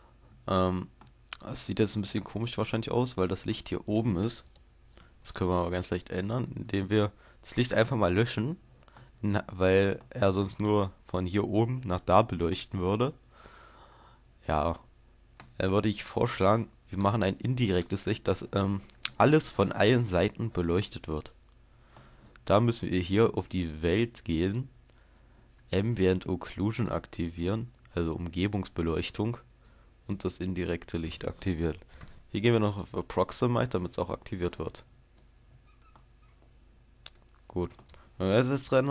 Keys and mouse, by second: 24.5-29.6 drag, 30.1-37.2 drag, 37.2-38.9 middle drag.